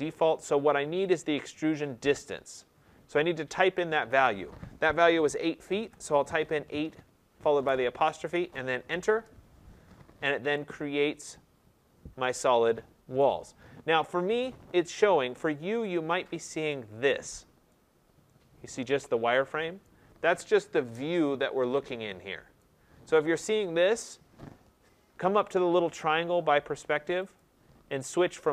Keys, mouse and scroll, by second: 5.7 8, 7.5 ., 9.0 Return, 12.6 scroll, 13.1 right click, 15.9 click, 16.6 click, 19.8 right click, 20.3 middle click, 20.4 middle click, 20.9 middle click, 21.1 middle click, 22.5 right click, 27.3 click.